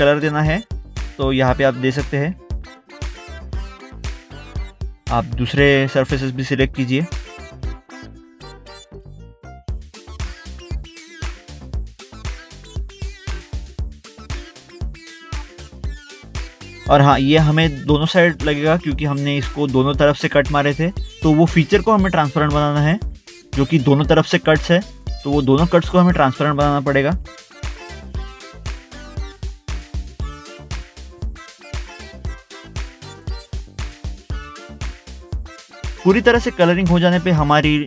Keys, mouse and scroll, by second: 0.5 double click, 2.3 middle click, 2.5 middle click, 2.6 scroll up 1, 3.0 scroll down 1, 4.2 click, 5.1 scroll up 1, 5.3 scroll down 1, 5.6 click, 5.9 middle click, 6.1 middle click, 6.4 click, 7.2 click, 8.1 middle click, 8.9 middle click, 9.3 scroll down 1, 9.9 middle click, 10.0 middle click, 10.3 scroll up 1, 10.8 middle click, 12.1 middle click, 12.3 scroll down 1, 12.8 middle click, 12.9 middle click, 13.4 double click, 13.6 click, 17.3 middle click, 18.5 middle click, 19.3 middle click, 19.9 click, 20.2 scroll up 1, 20.3 scroll down 1, 21.2 middle click, 21.3 middle click, 21.8 click, 26.9 middle click, 27.2 middle click, 27.5 scroll down 1, 28.1 click, 29.1 scroll up 1, 29.8 middle click, 31.4 middle click, 31.7 middle click, 32.8 middle click, 32.9 scroll down 1, 35.3 scroll up 1.